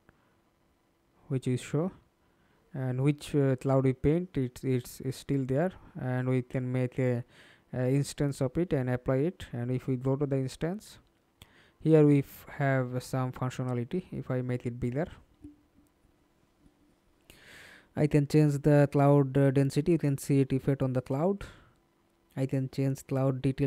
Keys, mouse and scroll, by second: 1.4 middle click, 1.9 ctrl+space, 3.7 right click, 5.8 middle click, 9.0 double click, 12.7-13.2 scroll down 1.